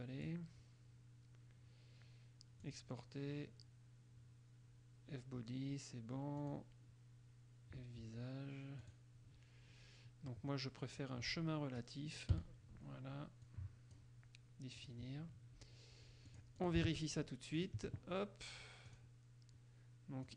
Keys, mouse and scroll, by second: 2.8 click, 6.6 click, 8.9 click, 11.2-12.2 drag, 12.5 i, 13.6 click, 15.0 click, 16.4 click, 17.0 alt+Tab, 17.8 alt+click, 19.0 click.